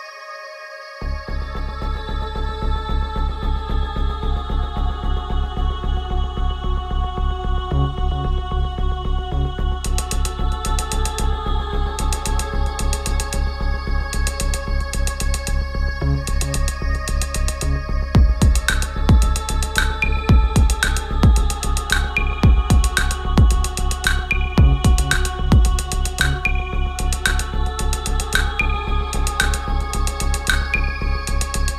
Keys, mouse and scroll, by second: 0.0-1.4 typing, 2.2-5.7 drag, 5.7 Return, 6.8-15.0 drag, 15.5-17.3 shift+drag, 19.1 shift+Up, 20.4-29.3 drag, 30.8-31.7 drag.